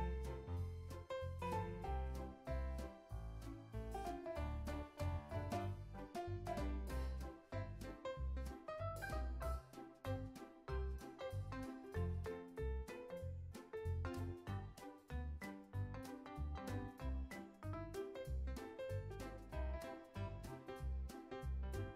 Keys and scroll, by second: 10.3 super+c, 10.5 z, 11.0 super+v, 11.3 x, 12.3 super+v, 13.0 super+s, 13.4 space, 16.5 space, 16.7 super+s, 17.1 z, 18.4 super+s.